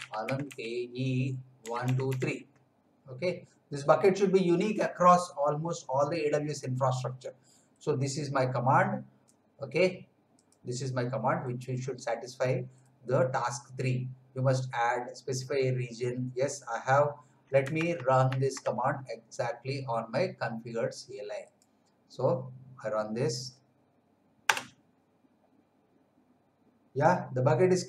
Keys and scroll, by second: 0.0-2.5 typing, 17.9 alt+Tab, 24.4 Return.